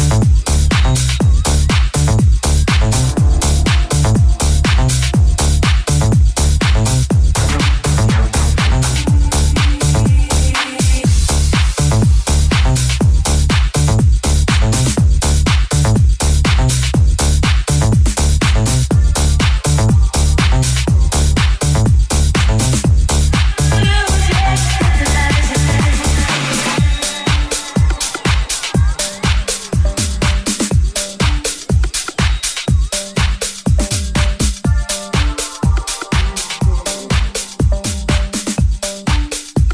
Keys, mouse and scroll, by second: 0.0 alt+z, 0.8 r, 4.0-8.8 middle drag, 7.8 alt+z, 8.9 alt+z, 9.2 r, 12.1-25.7 middle drag, 12.1 g, 21.7 shift+c, 22.8 n, 25.4-34.3 ctrl+drag, 33.1 middle click, 33.1 right click, 33.8 middle click, 33.8 right click, 35.2 KP_5, 36.1-38.1 ctrl+drag, 36.1 ctrl+middle click, 36.8 shift+middle click, 37.7 middle click, 37.7 right click, 38.2-39.7 drag, 39.4 right click.